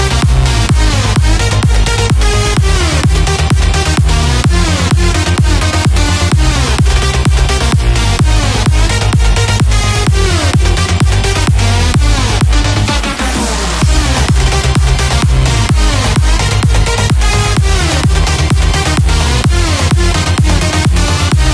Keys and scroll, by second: 20.7 ctrl+j.